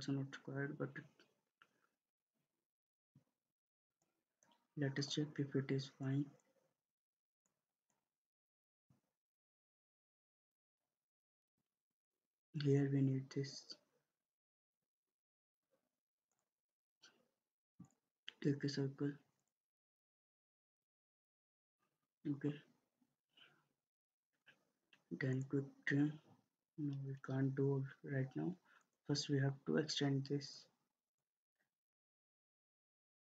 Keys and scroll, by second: 2.1 ctrl+z, 11.4 Escape, 24.2 Escape.